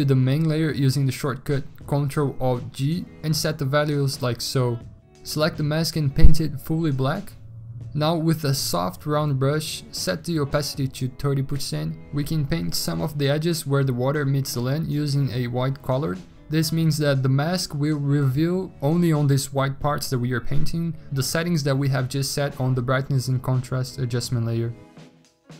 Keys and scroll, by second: 0.2 ctrl+alt+g, 7.3 ctrl+i, 8.8 b, 20.9-21.6 scroll, 22.4 ctrl+z.